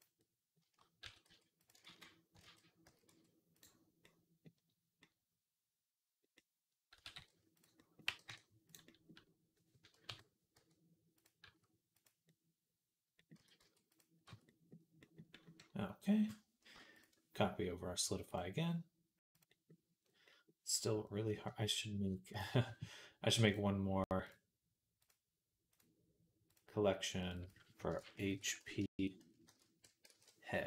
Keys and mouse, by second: 0.0 click, 0.9 s, 1.6 e, 1.7 ctrl+z, 2.2 ctrl+z, 2.7 s, 3.8-7.9 middle drag, 6.8 s, 7.9-12.1 drag, 7.9 g, 9.9 KP_3, 10.4 e, 11.3 s, 12.1 middle click, 12.7 middle click, 13.2 s, 14.1 Tab, 15.2-20.6 middle drag, 20.6-22.3 drag, 22.3-28.4 right drag, 27.0 click, 27.2-30.6 drag.